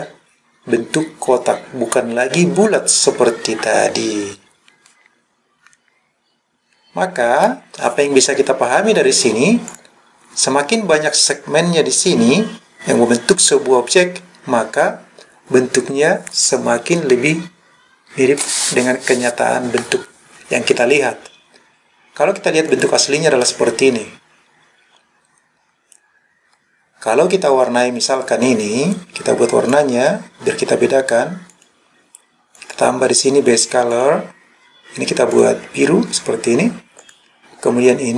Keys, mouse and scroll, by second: 2.0-7.5 middle drag, 9.8 click, 22.8 click, 27.5 click, 29.8 click, 31.6 click, 32.6 click, 34.0 click, 37.1 click.